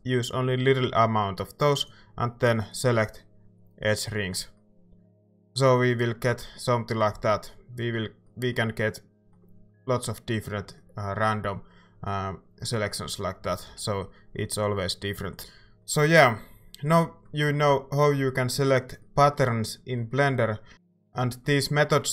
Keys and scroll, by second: 12.5 a, 13.4 a, 13.6 a.